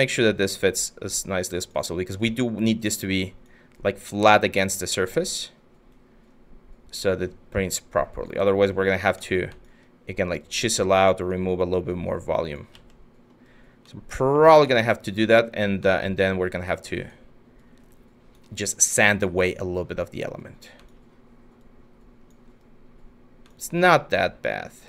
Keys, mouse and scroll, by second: 12.3 ctrl+z.